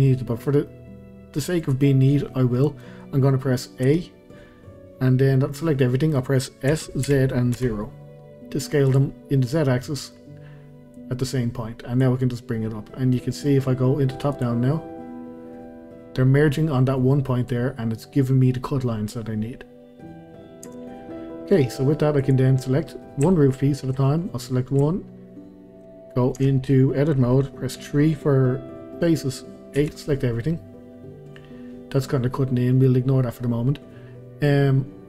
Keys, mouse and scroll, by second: 0.2-0.7 scroll up 1, 0.7-2.2 middle drag, 2.2 scroll down 1, 2.5-3.9 middle drag, 3.9 a, 5.6-6.7 middle drag, 6.7 s, 9.6 scroll down 2, 9.8-10.9 middle drag, 10.9 click, 12.2-14.3 middle drag, 14.3 click, 14.8-15.7 scroll up 2, 15.7-17.1 scroll up 1, 17.1-19.2 scroll down 1, 19.8-20.7 scroll up 1, 20.7 Tab, 21.1 scroll down 1, 21.3-22.2 scroll up 1, 22.2 click, 23.3-24.6 shift+scroll, 24.6-26.4 shift+middle drag, 26.4 Tab, 27.8 3, 29.0-29.8 scroll up 1, 29.8 a, 31.1 scroll down 1, 31.3-31.9 scroll up 1.